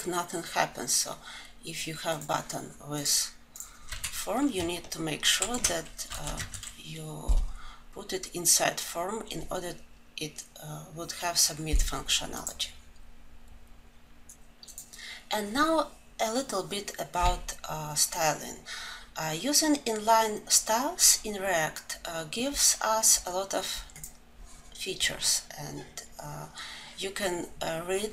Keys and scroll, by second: 5.4 alt+shift+Down.